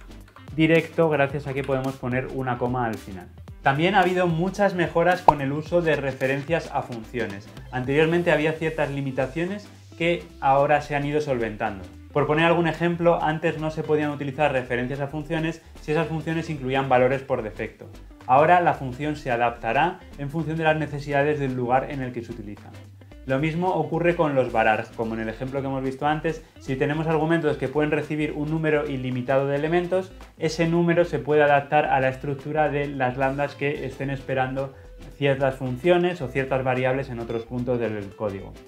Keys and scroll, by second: 0.2 ctrl+x.